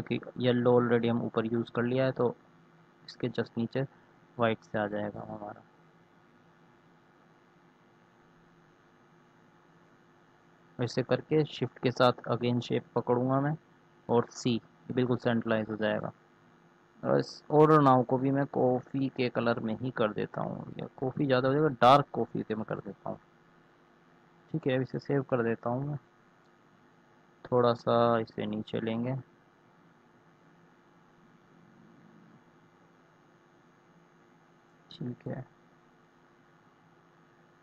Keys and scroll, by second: 13.8 c, 24.5 ctrl+s, 28.1 Down, 31.1 Caps_Lock, 33.7 c.